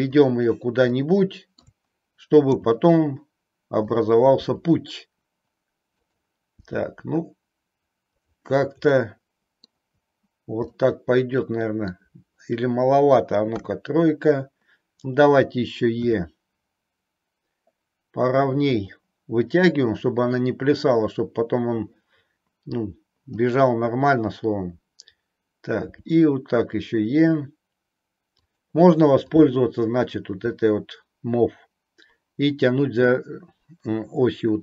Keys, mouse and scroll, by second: 0.1 click, 1.0 middle click, 3.8 click, 4.3 e, 6.0 click, 6.6 e, 8.1 click, 9.0 middle click, 10.6-11.8 middle drag, 11.8 scroll down 1, 16.0 e, 18.7 click, 28.5 click, 29.2 click.